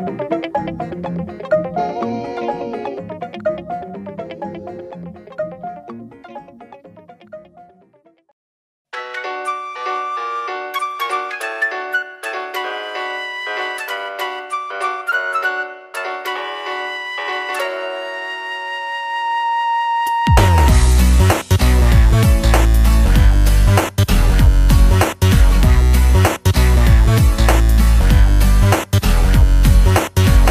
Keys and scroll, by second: 7.8 space, 8.6 space, 12.4 space, 12.8 space, 13.7 space, 14.1 space, 25.2 space.